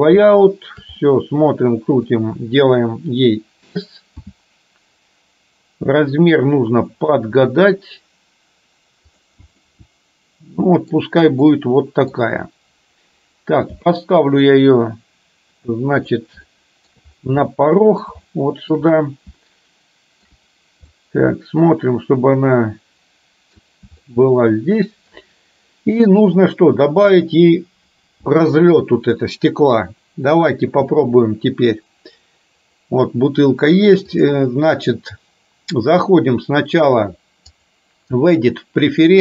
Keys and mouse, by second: 0.3 shift+middle click, 1.1-2.2 middle drag, 4.2 s, 9.7-11.1 middle drag, 11.4 middle click, 13.8 g, 16.6 shift+middle click, 17.7 middle click, 18.3 shift+middle click, 19.4 shift+middle click, 21.1-23.7 middle drag, 24.1-25.2 shift+middle drag, 27.1 click, 32.5 click, 34.2-36.9 drag, 37.7-39.2 drag.